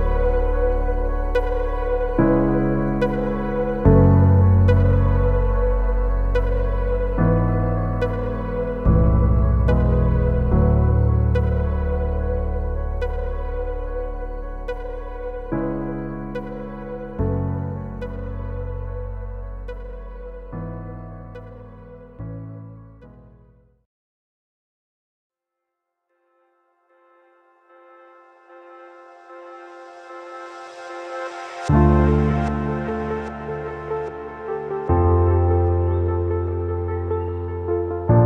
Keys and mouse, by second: 0.5 x, 1.4 shift+drag, 2.4 click, 3.0-5.9 typing, 3.2 Tab, 4.7 shift+click, 6.8 shift+drag, 7.6 shift+click, 8.3-9.4 shift+drag, 9.5 b, 10.7-12.4 shift+drag, 12.5 b, 13.6-14.8 shift+drag, 15.0 b, 15.9-17.2 shift+drag, 17.3 b, 18.3 shift+click, 19.3 b, 20.2 shift+click, 21.1 b, 22.0-23.4 shift+drag, 23.6 z, 24.0 Tab, 24.3 a, 24.6 ctrl+s, 24.8-28.2 drag, 28.4 ctrl+s, 31.4 KP_3, 32.0 z, 32.6-33.5 shift+drag, 33.8 z, 34.5-35.5 shift+drag, 35.6 ctrl+s, 36.1-36.8 shift+drag, 37.1-38.0 shift+drag.